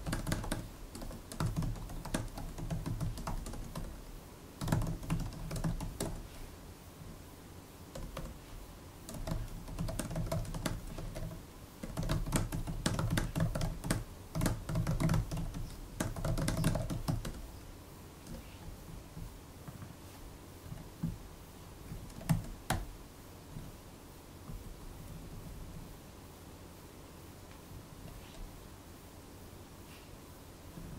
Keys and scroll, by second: 0.0-6.4 typing, 6.9 Page_Down, 7.8 Return, 8.0 Return, 8.9-18.2 typing, 20.6 super+Left, 21.8 super+Right, 22.1 alt+shift+Left, 22.6 BackSpace, 24.8 Right, 25.0 Right, 25.2 Down, 25.3 Down, 25.5 Down, 25.6 Down, 27.8 super+Down, 30.6-30.9 typing.